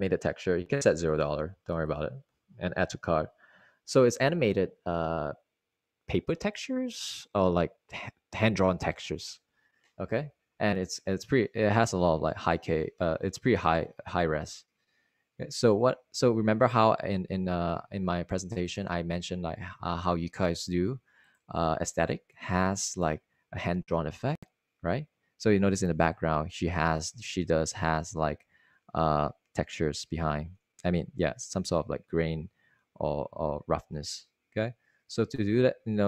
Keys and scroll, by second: 4.2 0, 17.8 super+Tab, 19.2 super+Tab.